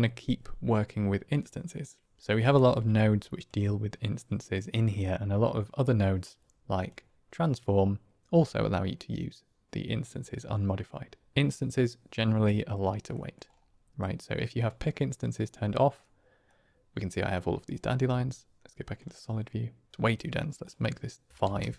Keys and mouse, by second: 2.8 shift+a, 13.1 middle click, 14.6 click, 16.4 middle click, 19.5-19.9 drag, 20.4 click.